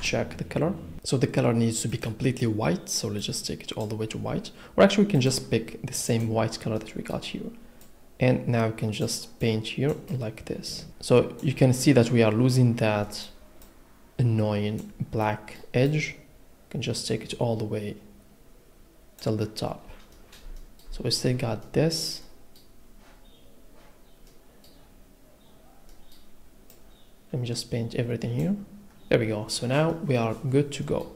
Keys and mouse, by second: 1.9 click, 6.1 click, 6.8 middle click, 7.8 click, 9.4 click, 10.1 click, 13.0 click, 13.6 click, 15.2 click, 15.8 click, 20.1 click, 20.5 shift+click, 26.7 click, 30.8 middle click.